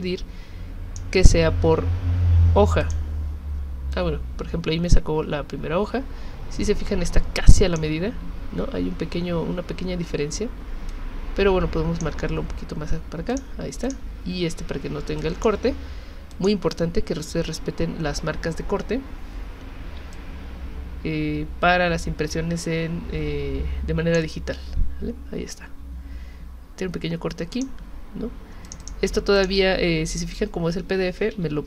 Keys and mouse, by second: 2.8 click, 3.9-7.8 drag, 10.9 click, 13.3 click, 13.8 click, 15.2 click, 16.3 click, 20.1-24.2 shift+drag, 27.5 click, 28.7 click, 28.8 click, 29.4 click, 30.1 click, 31.3 z.